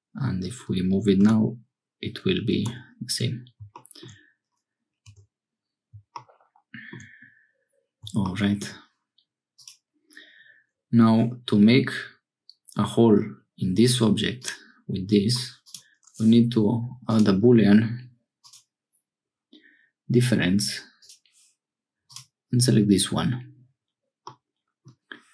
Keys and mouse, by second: 1.2 g, 5.0 Tab, 9.5 click, 14.4 click, 17.1-18.5 drag, 21.0 click, 24.2 middle click.